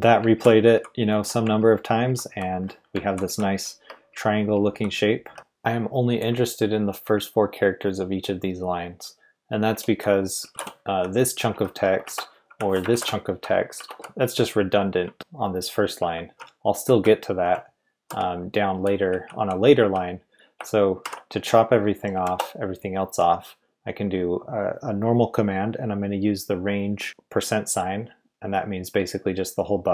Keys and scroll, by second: 0.3 ctrl+d, 0.5 ctrl+d, 0.7 ctrl+d, 1.6 ctrl+u, 1.8 ctrl+u, 2.0 ctrl+u, 3.1 ctrl+d, 3.2 ctrl+d, 3.5 ctrl+d, 4.3 ctrl+u, 4.5 ctrl+u, 4.7 ctrl+u, 9.7 Escape, 9.7-21.0 typing, 12.0 Escape, 12.9 ctrl+v, 13.7 Escape, 22.1 typing.